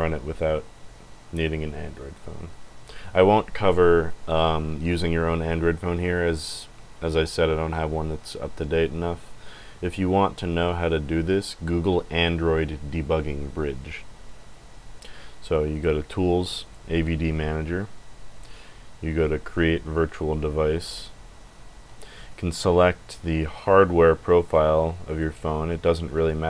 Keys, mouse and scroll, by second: 15.7 click, 16.6 click, 20.9 click, 22.4-23.3 scroll down 8, 24.4 click, 25.0 click, 25.4 scroll down 2, 25.8 click, 26.1-26.4 scroll down 4.